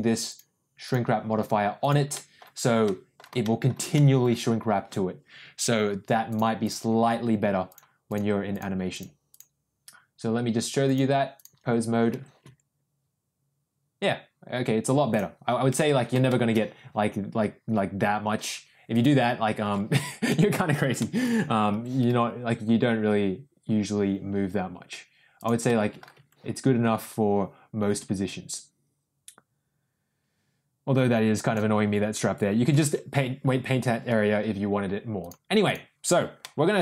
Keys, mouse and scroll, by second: 0.2 click, 0.8 click, 1.7 click, 2.1 middle click, 2.8 middle click, 3.4 shift+middle click, 3.9 middle click, 6.3 click, 7.6 click, 8.4 click, 8.9 click, 9.2 click, 10.8 click, 12.1 r, 16.1 ctrl+shift+z, 16.2 shift+middle drag, 16.7 r, 19.9 ctrl+z, 20.2 middle click, 20.9 middle click, 21.7 r, 25.6-26.0 middle drag, 26.1 r, 33.1 ctrl+z, 35.2 click, 36.3-36.7 middle drag.